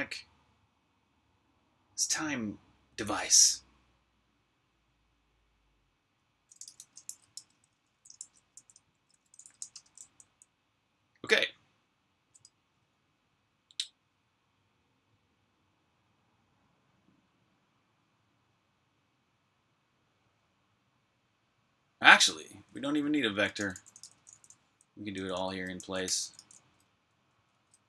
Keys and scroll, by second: 6.2-10.0 typing, 11.7-12.5 typing, 14.6 typing, 22.1-27.0 typing.